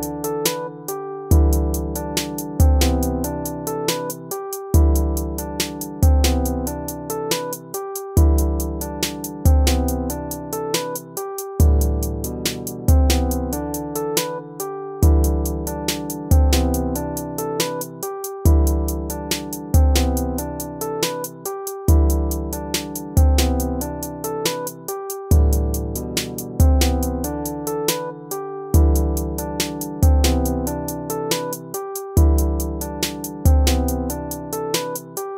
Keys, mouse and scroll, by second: 26.9 ctrl+z, 27.8 ctrl+z, 32.1 ctrl+z.